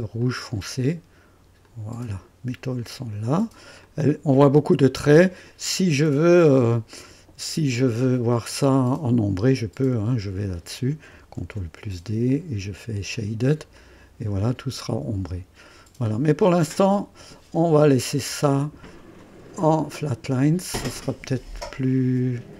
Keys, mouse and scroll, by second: 0.2 click, 1.6 click, 2.8 click, 3.4 click, 3.8-5.6 drag, 4.0 typing, 10.4 click, 11.4 ctrl+d, 12.3 click, 13.1 click, 13.7 click, 14.8-16.3 drag, 18.0 click, 19.2 click, 19.9 click.